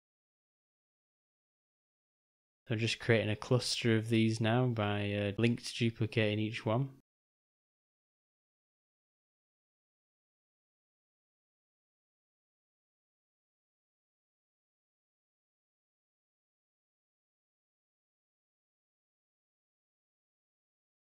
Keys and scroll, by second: 2.2 alt+d, 3.7 s, 5.3 ctrl+g, 12.3 shift+], 12.8 Delete, 14.8 ctrl+z, 16.4 shift+], 17.0 Delete, 20.3 alt+d.